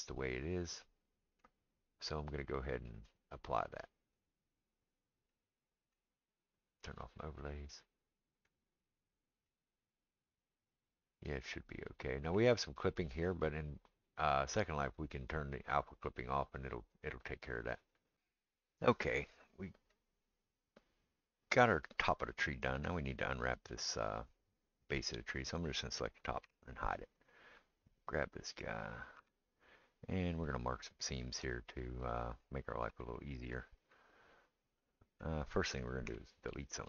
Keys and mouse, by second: 3.2-7.0 drag, 7.0-28.7 middle drag, 25.1 click, 26.4 h, 28.7 click, 28.8-36.8 middle drag, 29.2 Tab, 36.1 3, 36.8 click.